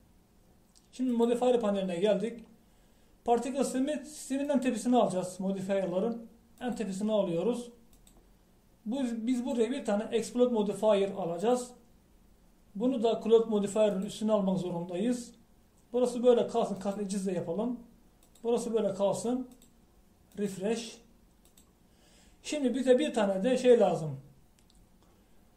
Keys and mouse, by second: 2.2-12.6 drag, 15.0-25.5 drag.